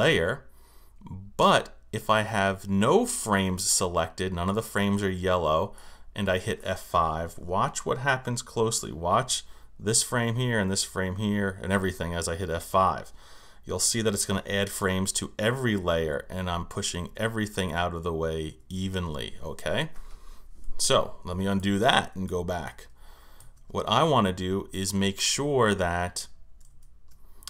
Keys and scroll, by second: 15.3 F5, 21.1 super+z, 26.7 super+z.